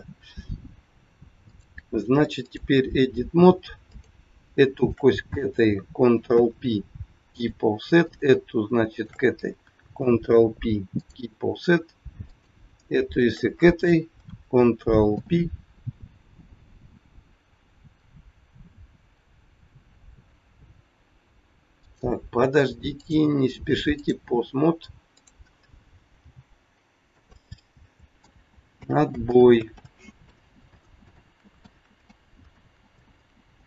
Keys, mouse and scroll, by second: 1.4 click, 3.9 click, 4.8 shift+click, 5.0 shift+click, 6.2 ctrl+p, 8.0 click, 8.9 shift+click, 9.9 ctrl+p, 12.2 click, 13.1 shift+click, 15.1 ctrl+p, 21.7 click, 22.9 click, 26.2 click, 26.2 g, 28.1 ctrl+z, 28.7 ctrl+z, 29.2 ctrl+z, 29.7 ctrl+z, 30.1 ctrl+z, 31.0 ctrl+z, 31.1 ctrl+z, 31.5 ctrl+z, 32.1 ctrl+z, 32.5 ctrl+z, 33.0 ctrl+z, 33.5 ctrl+z.